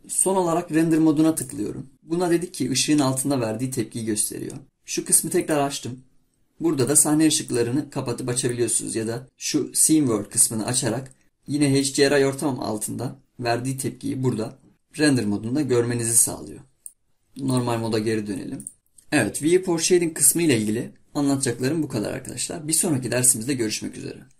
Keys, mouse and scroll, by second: 1.5 click, 5.4-8.4 drag.